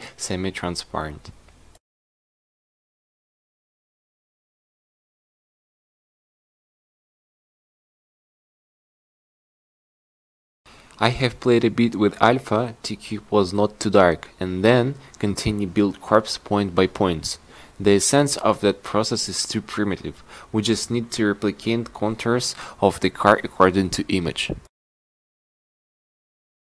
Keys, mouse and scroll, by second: 13.4 q, 14.4 q, 16.8-18.9 drag, 19.3 a, 19.8 c, 24.9 q, 26.2 a.